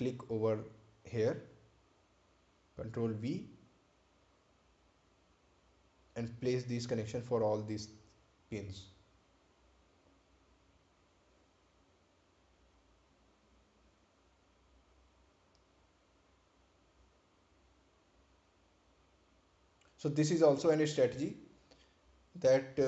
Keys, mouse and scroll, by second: 1.1 click, 4.3 ctrl+click, 5.7 ctrl+v, 7.0 click, 13.4 Delete, 15.0 ctrl+v, 16.4 click, 21.6 ctrl+click.